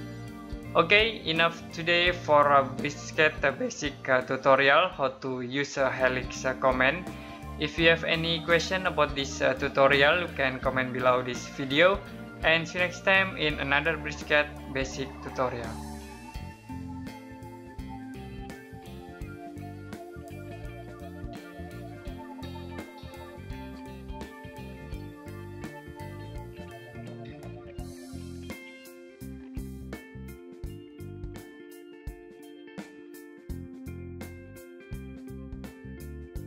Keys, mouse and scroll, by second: 0.3 Escape.